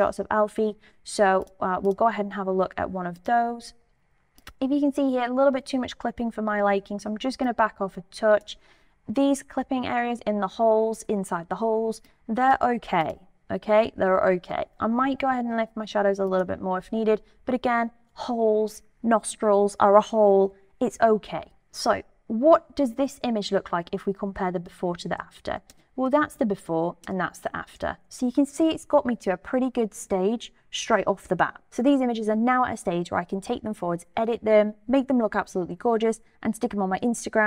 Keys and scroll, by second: 25.7 \, 27.0 \.